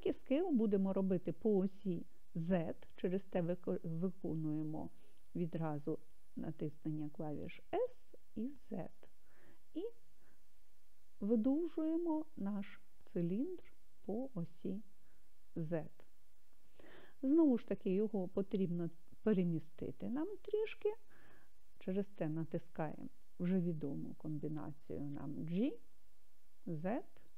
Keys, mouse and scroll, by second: 5.8 s, 8.0 z, 14.6-16.9 drag, 25.4 g, 26.7 z.